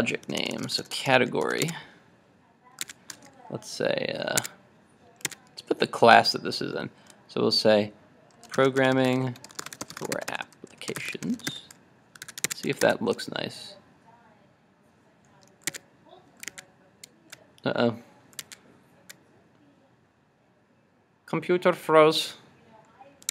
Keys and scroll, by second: 1.7 super+Tab, 12.3 super+s, 12.6 super+Tab, 12.9 super+r, 15.8 super+Tab, 16.5 super+Tab, 18.4 super+Tab.